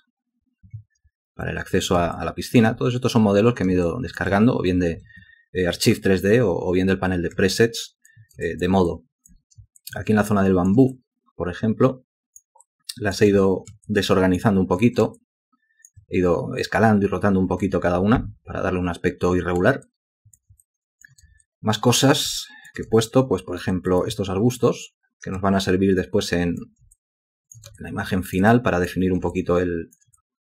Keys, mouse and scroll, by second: 2.1 ctrl+alt+click, 3.8 ctrl+alt+click, 7.5 alt+click, 8.4 alt+shift+click, 9.8 ctrl+alt+click, 10.9 alt+click, 12.6 alt+click, 13.8 alt+click, 15.2 alt+click, 19.8 alt+click, 20.6 ctrl+alt+click, 21.4 alt+shift+click, 22.4 ctrl+alt+click, 23.0 alt+shift+click, 23.9 alt+click, 25.6 alt+click, 26.3 alt+click, 26.9 ctrl+alt+click, 27.8 alt+shift+click, 28.5 alt+click, 29.3 alt+shift+click, 30.2 alt+click.